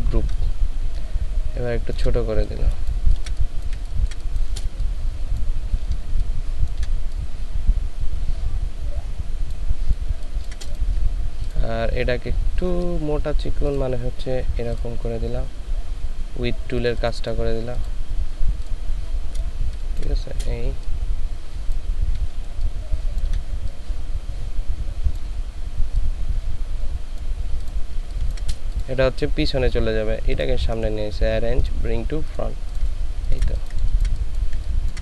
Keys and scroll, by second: 3.0 ctrl+space, 3.7 ctrl+space, 10.2 ctrl+space, 19.7 ctrl+space, 28.0 ctrl+space, 33.5 ctrl+space.